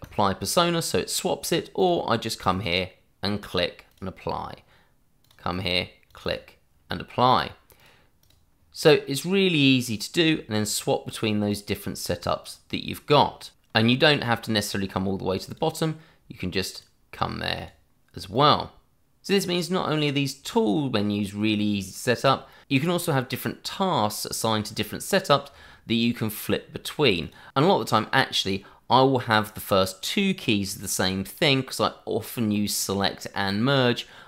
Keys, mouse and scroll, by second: 0.0 click, 6.3 double click, 7.3 click, 7.9 double click, 10.6 click, 15.4 click, 22.2 scroll down 1, 22.6 middle click, 23.1 middle click, 27.2 click.